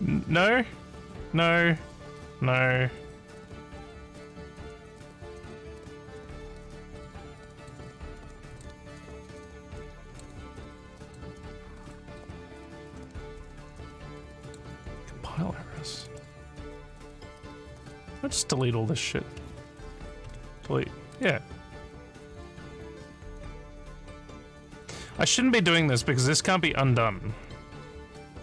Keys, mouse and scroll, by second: 7.6 click, 8.5 click, 10.1 click, 11.0 click, 14.5 click, 15.9 click, 16.1 right click, 17.9 click, 18.5 click, 21.1 click.